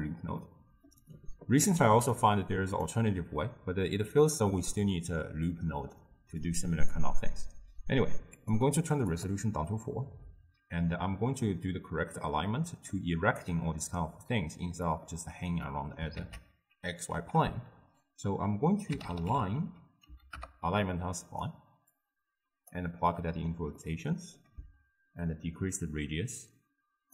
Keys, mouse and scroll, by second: 9.1 click, 12.2-20.4 middle drag, 22.8-23.9 drag, 23.9-25.4 middle drag, 25.4-27.1 shift+drag.